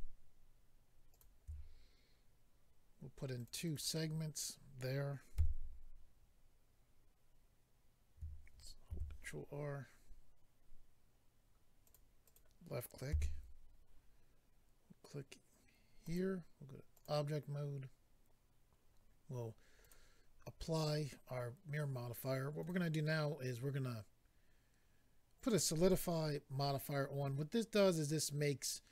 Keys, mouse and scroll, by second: 1.1 shift+click, 3.3 click, 3.6 click, 5.4 a, 8.9 ctrl+r, 9.4-10.1 scroll up 2, 11.0-11.8 scroll up 1, 11.8 click, 11.9 click, 12.3 click, 12.4 double click, 13.1 a, 16.0 click, 16.9 click, 19.8 click, 22.6 click, 22.7 click, 25.3 click, 25.5 click.